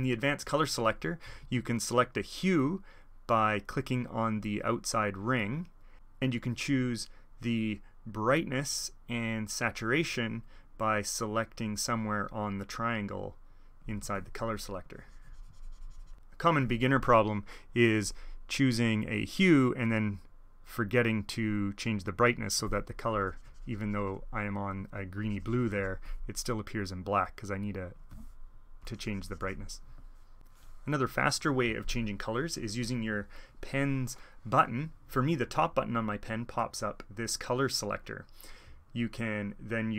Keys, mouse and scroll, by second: 2.9-5.9 drag, 8.5-14.1 drag, 14.4-16.1 drag, 17.4-18.2 drag, 18.6-20.0 drag, 23.1-24.4 drag, 25.2-26.2 drag, 26.8-31.7 drag, 37.0 click.